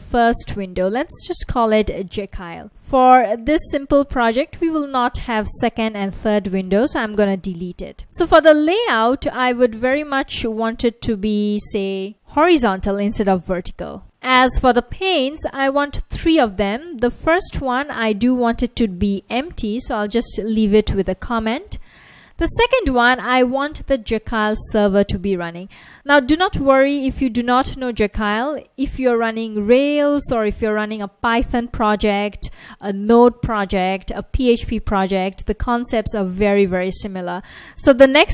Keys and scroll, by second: 1.0-2.7 typing, 6.7-7.9 typing, 8.0 super+z, 12.7-14.2 typing, 17.5 shift+3, 18.7-20.1 typing, 27.7 F1, 38.1-38.3 typing.